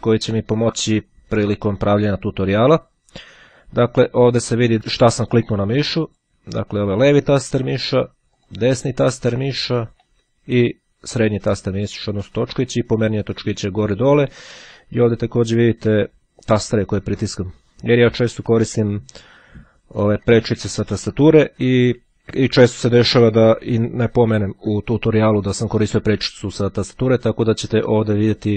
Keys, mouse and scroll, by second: 0.1 click, 0.7-2.9 drag, 4.7 click, 5.8 middle click, 6.2 click, 6.8 middle click, 8.5 right click, 10.1 click, 10.6 middle click, 11.8 scroll up 2, 12.0 scroll down 2, 12.1-14.3 scroll up 2, 19.7 d, 21.9 f.